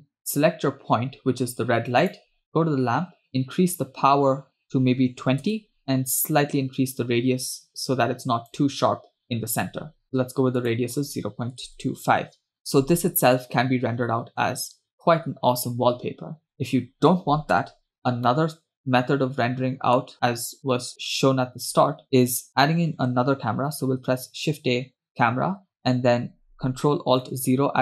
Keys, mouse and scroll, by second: 0.2 click, 2.2 click, 3.3-8.8 drag, 10.0-12.4 drag, 12.6-13.0 scroll down 2, 14.2-14.8 scroll up 1, 18.0 KP_0, 18.3 scroll down 1, 18.8-20.1 middle drag, 20.1-21.3 scroll up 4, 21.3-21.9 scroll down 1, 24.0 shift+a.